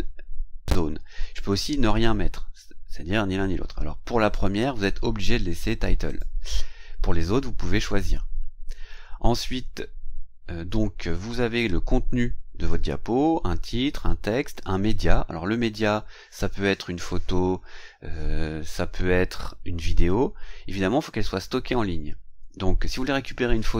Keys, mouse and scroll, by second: 4.2 click, 6.1 click.